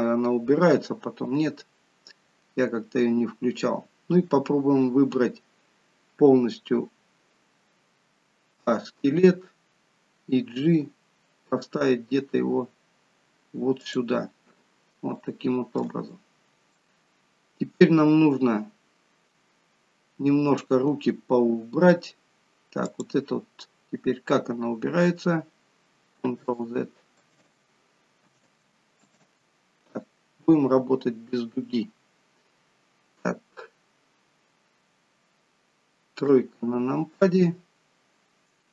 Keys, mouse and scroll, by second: 8.6 a, 10.7 g, 15.2 shift+middle click, 16.2 middle click, 22.8 click, 26.7 ctrl+z, 27.7 ctrl+z, 29.5 ctrl+z, 36.3 KP_3, 37.8-38.6 scroll down 1.